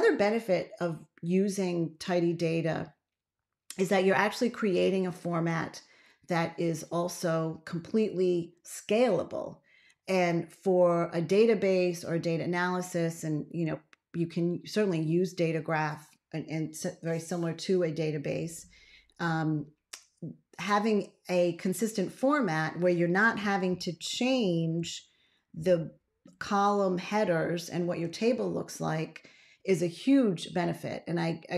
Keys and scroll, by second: 23.6 ctrl+a, 24.7 ctrl+z.